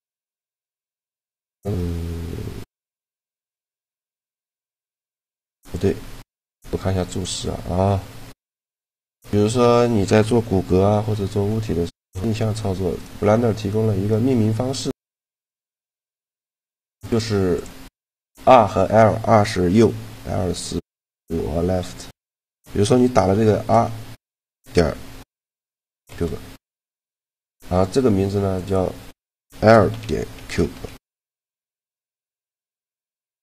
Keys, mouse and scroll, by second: 5.4-7.0 drag, 8.6-10.1 middle drag, 10.9 shift+d, 14.0 right click, 15.6-17.1 drag, 16.1 right click, 17.3-18.9 drag, 17.3 right click, 27.4-29.2 right drag, 28.4-30.1 drag.